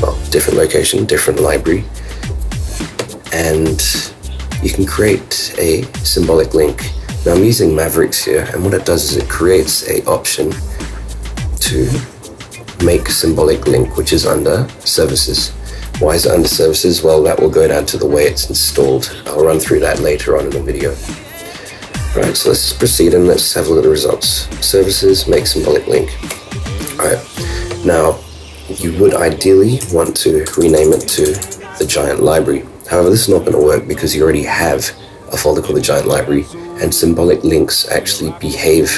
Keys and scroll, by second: 4.0 super+q.